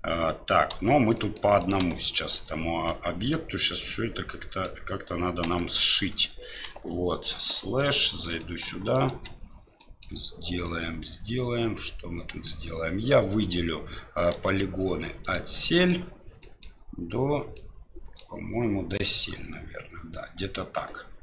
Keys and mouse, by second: 0.7 Tab, 1.1 middle click, 1.6 right click, 2.0 Tab, 2.9 middle click, 4.3 middle click, 5.4 Tab, 6.7 KP_Divide, 7.5 middle drag, 8.0 shift+middle drag, 8.4 middle drag, 8.8 right click, 9.1 Tab, 9.8 middle click, 10.6-12.4 middle drag, 13.4 right click, 14.3 3, 15.2 right click, 15.6 middle click, 16.4 middle click, 17.5 middle click.